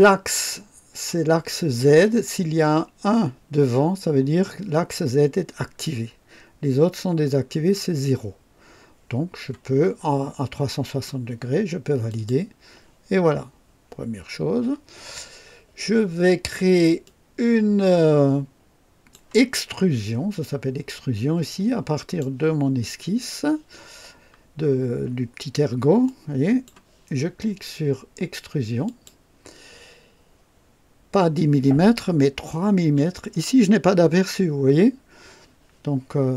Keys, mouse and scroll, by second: 12.0 click, 16.9-19.2 drag, 21.9 click, 26.0-26.8 drag, 28.8 click, 32.7 KP_3.